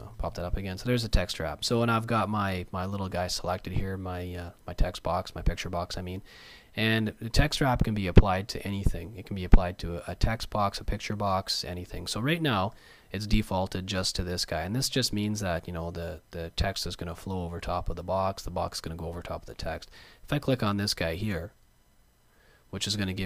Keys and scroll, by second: 0.0 alt+super+w.